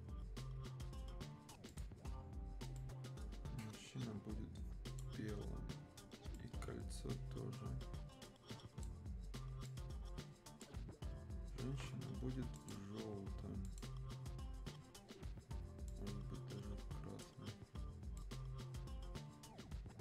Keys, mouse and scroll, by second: 1.7-11.1 drag, 11.1 scroll down 1, 12.5-20.0 drag.